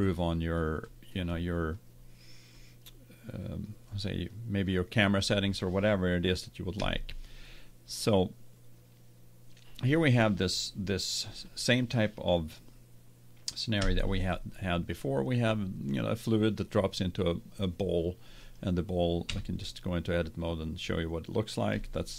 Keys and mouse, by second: 3.4 middle click, 6.9 KP_0, 13.9 KP_1, 18.4 right click, 19.3 Tab, 20.4-22.0 middle drag.